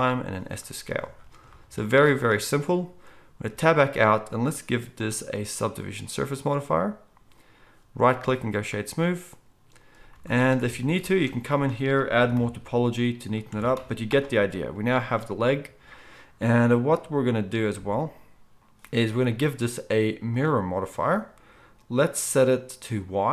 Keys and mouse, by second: 0.0 s, 1.8 z, 3.4 Tab, 6.5-13.5 drag, 8.1-23.3 right drag, 10.1 z, 10.6 Tab, 11.5 ctrl+r, 13.5 Tab, 13.7 z.